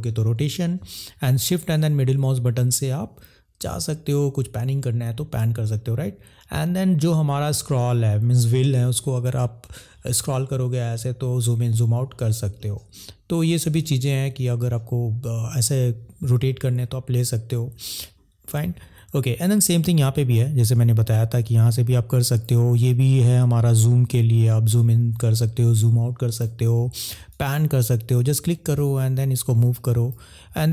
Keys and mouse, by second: 1.5 shift+middle click, 20.4 click, 23.2 click, 27.3 click.